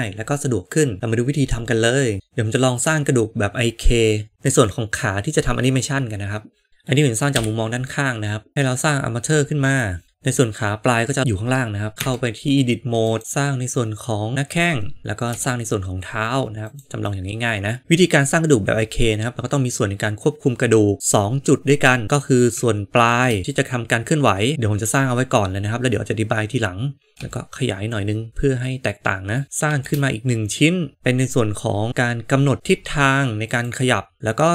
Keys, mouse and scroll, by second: 0.6 click, 2.2 g, 2.7-6.8 middle drag, 6.6 n, 7.3 KP_3, 8.5 shift+a, 11.9 Tab, 13.2 e, 15.2 e, 23.0 shift+d, 27.1 s, 29.3 s, 29.6 shift+d.